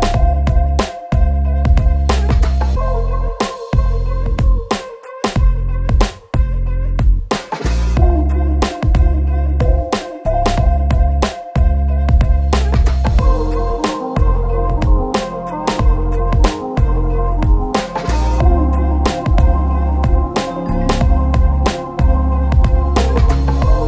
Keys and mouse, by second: 0.1 ctrl+shift+middle click, 0.3 ctrl+b, 1.8 Tab, 2.1 x, 3.1 alt+click, 3.3 alt+Tab, 3.3 alt+click, 3.7 KP_1, 3.9 e, 4.0 shift+click, 4.4 ctrl+z, 4.6 ctrl+z, 5.0 KP_1, 5.0 e, 5.2 alt+s, 6.6 Tab, 6.8 q, 9.0 ctrl+shift+middle click, 9.4 ctrl+a, 9.4 q, 9.9 alt+Tab, 10.3 ctrl+b, 11.1 ctrl+z, 11.1 Tab, 11.1 ctrl+a, 11.3 Tab, 11.3 ctrl+b, 11.9 shift+middle click, 12.3 Tab, 12.3 u, 12.5 shift+middle click, 13.2 KP_Divide, 13.4-17.1 typing, 13.6 click, 14.2 shift+click, 15.0 shift+click, 15.4 shift+middle click, 15.6 middle click, 15.9 middle click, 16.9 Tab, 16.9 shift+middle click, 18.1 Tab, 18.4 KP_Divide, 18.4-19.5 typing, 18.9 KP_Divide, 19.2 Tab, 19.2 shift+click, 19.6 shift+click, 20.0 Tab, 20.3 Tab, 20.6 shift+z, 21.5 Tab, 21.7 Tab, 21.9-23.6 typing, 22.4 shift+middle click.